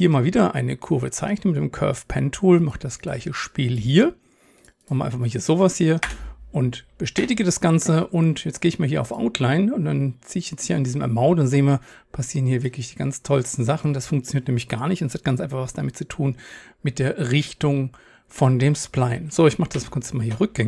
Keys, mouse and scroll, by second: 2.9-7.2 drag, 6.1 Return, 7.2 Tab, 19.8 ctrl+z.